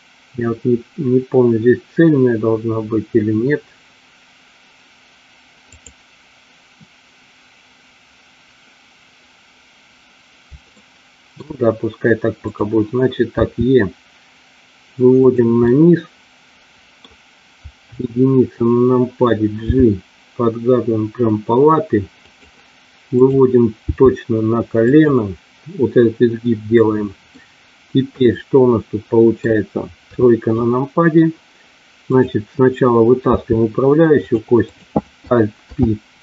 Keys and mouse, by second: 5.7 click, 10.8 shift+middle click, 13.3 e, 15.2 click, 15.6-16.9 middle drag, 17.8 KP_1, 19.7 g, 22.2 click, 23.2 click, 23.8 g, 24.9 click, 26.8 middle click, 28.2-29.5 middle drag, 30.1 KP_3, 33.3 e, 34.6 click, 35.6 alt+p.